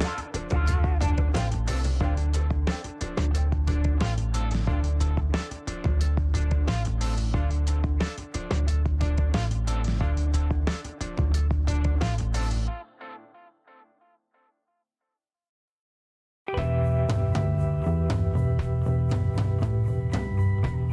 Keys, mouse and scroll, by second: 0.5-1.7 typing, 7.2-7.7 scroll down 4, 8.4 scroll up 2, 9.9 click, 10.8 2, 12.0 click, 13.8 click, 15.0 click, 16.4 click, 17.5 click, 19.0 click, 20.4 click.